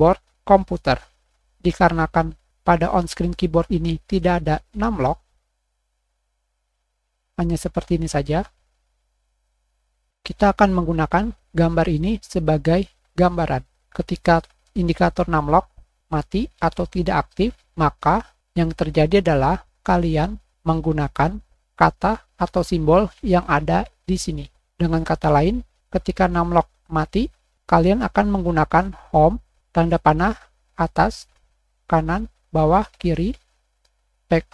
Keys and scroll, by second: 3.1 BackSpace, 5.2 Page_Up, 5.2 Page_Down, 5.3 Pause, 5.6 Insert, 5.6 End, 6.1 Pause, 6.4 End.